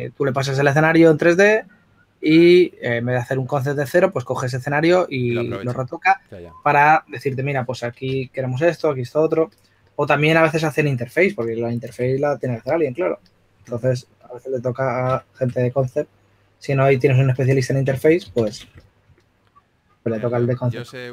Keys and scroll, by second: 8.3 s, 11.8 2, 18.5 shift+f.